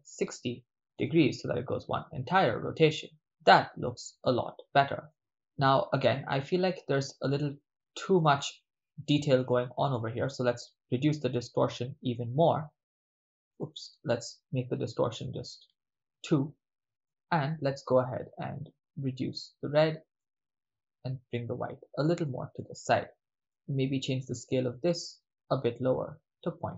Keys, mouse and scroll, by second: 3.1 middle click, 4.3-5.6 ctrl+middle drag, 7.0 ctrl+middle click, 9.0 middle click, 9.6 ctrl+middle click, 10.8-13.6 drag, 13.6-15.4 drag, 17.0 middle click, 19.0-19.8 drag, 20.1-22.3 drag, 22.5 click, 22.8 click, 23.5 middle click, 24.6 click, 25.1 click.